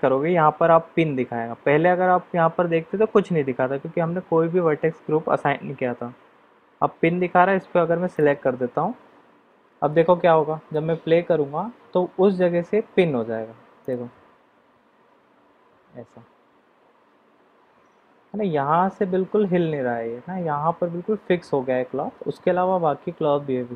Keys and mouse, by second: 9.9-10.7 middle drag, 13.8 click.